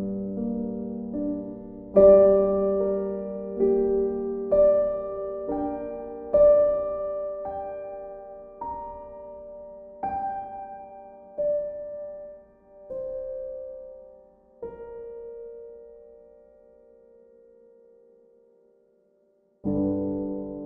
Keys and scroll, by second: 0.5 ctrl+z.